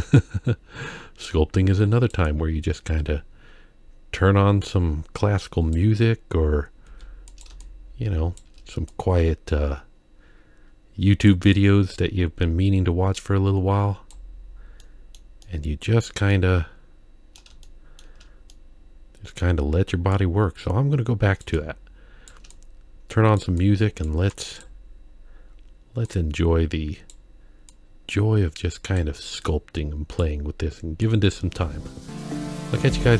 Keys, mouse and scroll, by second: 0.2-2.1 drag, 2.3-5.8 drag, 6.8 f, 7.6 shift+click, 8.9-11.3 drag, 11.6-14.1 drag, 14.8 middle click, 15.4 middle click, 16.3-17.4 middle drag, 17.6 shift+middle click, 18.5 middle click, 20.2-21.4 drag, 21.6 shift+click, 22.5 click, 23.6 click, 24.3 click, 26.0-27.1 drag, 27.7-29.0 drag, 29.4 click, 31.0-33.1 drag.